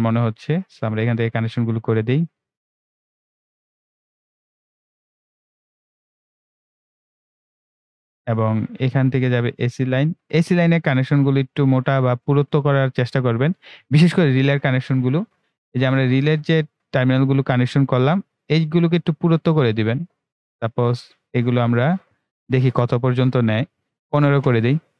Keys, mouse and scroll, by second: 1.2 click, 5.7-6.3 scroll down 2, 6.9 ctrl+scroll up 1, 7.7-8.7 ctrl+scroll down 1, 8.7 click, 14.3 right click, 16.0-17.8 scroll down 1, 18.0-24.9 drag.